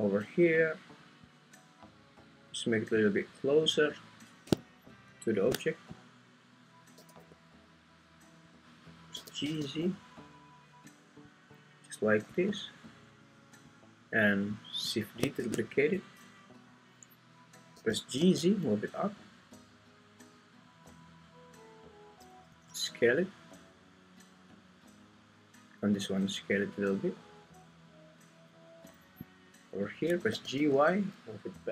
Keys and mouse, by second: 1.0 click, 3.0 click, 6.9 g, 7.2 y, 9.1 g, 9.4 z, 11.3 click, 15.4 shift+d, 15.9 Escape, 17.7 g, 18.2 z, 22.5 s, 25.6 click, 25.9 s, 30.3 g, 30.6 y.